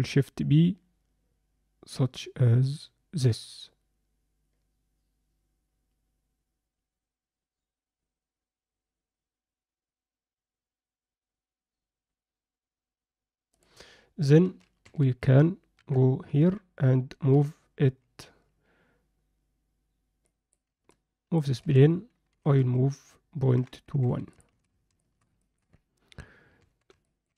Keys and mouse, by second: 14.4 z, 14.8 Tab, 15.7 KP_1, 16.4 z, 17.3 g, 20.3 click, 20.9 alt+middle click, 21.6 Tab, 22.3 g, 24.5 z, 25.0 alt+shift+middle drag, 25.4 ctrl+alt+middle click, 26.6 Tab, 27.1 middle click.